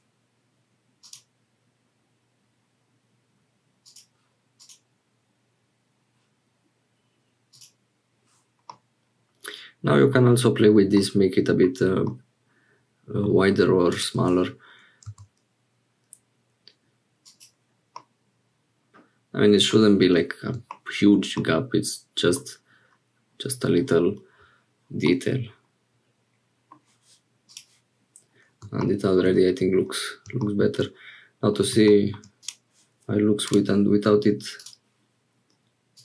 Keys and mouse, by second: 1.6 click, 3.8-7.3 drag, 7.5 click, 8.7-10.2 middle drag, 10.9 middle click, 12.0-13.3 middle drag, 13.9 click, 15.1 s, 18.0-19.8 middle drag, 21.3-22.4 middle drag, 25.1-26.8 middle drag, 28.8 shift+middle click, 30.8 middle click, 34.6 click.